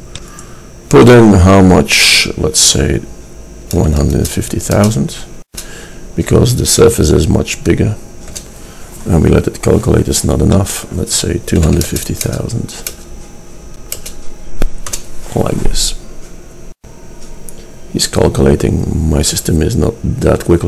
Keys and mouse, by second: 0.4 click, 10.7-12.5 drag.